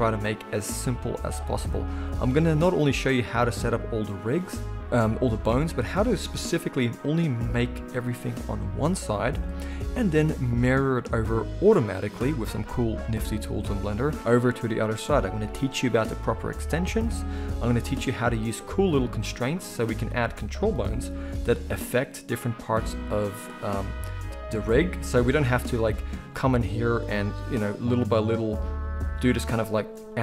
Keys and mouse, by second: 3.3 click, 3.4-6.2 middle drag, 6.2-18.3 drag, 18.3-23.2 shift+middle drag, 21.0 g, 23.2 click, 23.3-26.8 middle drag, 25.5 g, 26.8 click, 26.9-27.9 middle drag, 27.1 r, 27.9 r, 29.0 drag, 29.2 r.